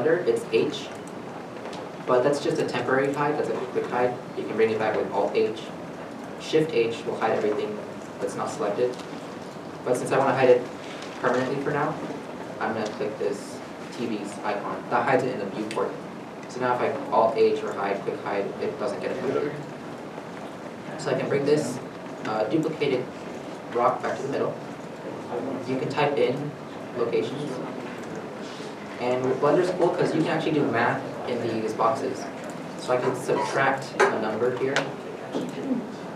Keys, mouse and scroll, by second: 0.6 middle click, 0.6 h, 4.9 h, 6.8 alt+h, 9.0 alt+h, 16.2 alt+h, 16.3 shift+middle click, 17.1 alt+h, 18.6 alt+a, 27.4 0, 28.0 Tab, 34.0 Tab, 34.1 -, 34.7 0, 35.1 1, 35.4 Return.